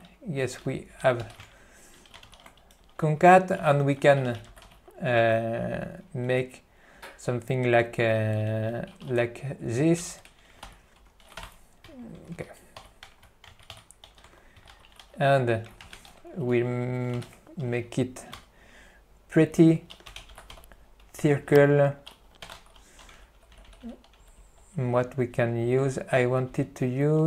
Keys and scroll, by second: 0.1 f, 1.0 q, 1.4 alt+c, 1.5 b, 2.5 ctrl+g, 2.9 ., 10.1 ctrl+g, 10.7 ctrl+g, 11.6 p, 13.6 alt+b, 14.2 alt+f, 14.4-15.4 typing.